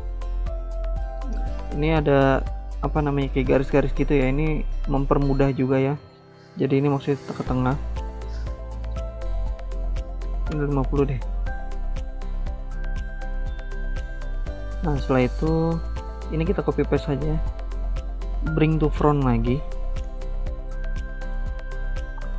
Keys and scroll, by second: 9.8-10.7 typing, 14.3-15.0 typing, 16.0 ctrl+c, 16.2 ctrl+v.